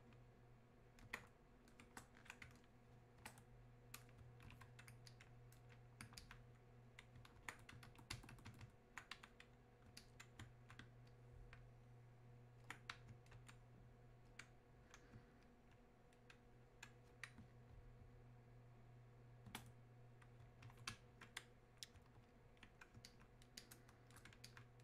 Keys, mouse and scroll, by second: 5.1-23.1 alt+drag, 23.1-24.8 alt+drag.